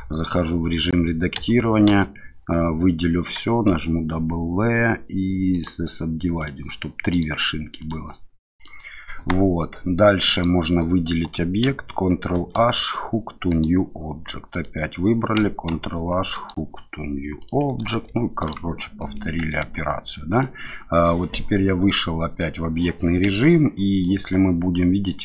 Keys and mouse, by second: 1.3 a, 1.9 a, 3.7 w, 6.4 click, 7.1 click, 7.8 click, 8.6 click, 10.3 click, 12.3 ctrl+h, 14.5 click, 15.7 ctrl+h, 17.4 click, 17.8 ctrl+h, 19.1 middle click, 19.6 Tab, 20.3 click, 23.2 KP_1, 24.0-25.2 drag.